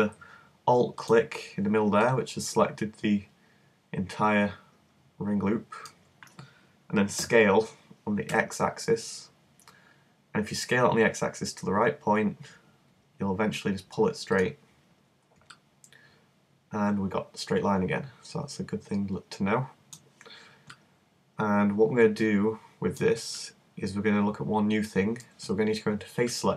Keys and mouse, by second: 1.1-4.1 middle drag, 7.2 s, 14.4-16.4 middle drag, 17.4-20.8 middle drag, 23.9-26.5 middle drag.